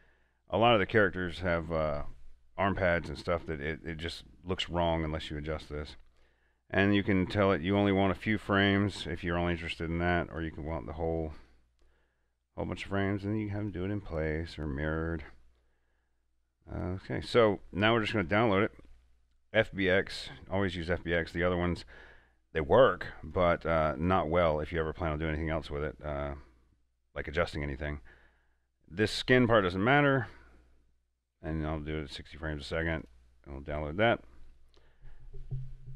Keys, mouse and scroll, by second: 4.1 click, 4.1 scroll down 1, 4.3 scroll up 1, 6.0-11.4 drag, 13.8 click, 18.3 click, 18.3 click, 23.4 click, 23.4 click, 30.2 click.